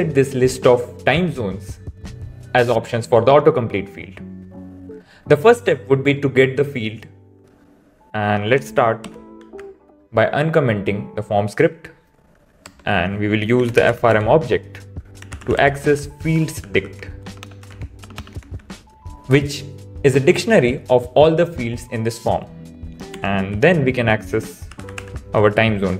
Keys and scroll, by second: 9.0 super+/, 9.5 super+s, 17.2 BackSpace.